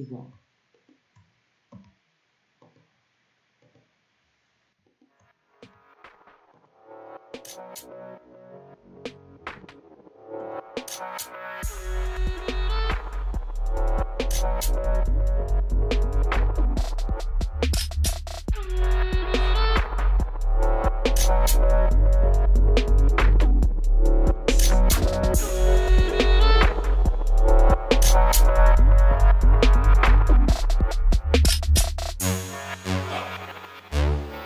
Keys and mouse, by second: 1.4 w, 4.5-5.6 drag, 4.9 w, 6.2 click, 6.7 w, 8.1 right click, 8.3 w, 9.8 right click, 10.2 w, 12.3 right click, 13.1 w, 14.2-15.4 drag, 16.2 middle click, 17.0 w, 17.5-18.6 drag, 17.7 w, 18.7 middle click, 19.2 right click, 20.0 w, 21.2 click, 21.5 w, 23.1 w, 24.4 click, 24.9 w, 26.3-26.9 drag, 26.9 w, 28.9 click, 29.5 w, 30.4-31.6 middle drag, 30.9 w, 32.9 middle click, 34.1 click, 34.3 w.